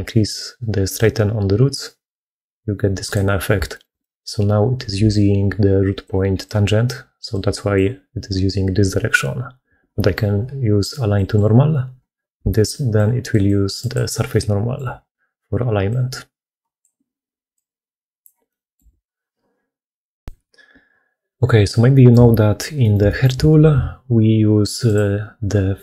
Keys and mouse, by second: 0.8-3.0 drag, 3.5 shift+click, 3.9 middle click, 4.8-9.7 d, 6.3 click, 11.0 click, 12.2-14.7 d, 12.8 click, 14.1 click, 15.7 click, 17.4 click, 18.3 click, 18.8 alt+a, 21.8 click, 22.7 shift+middle click, 22.9 middle click, 23.5 ctrl+shift+q, 25.7 click.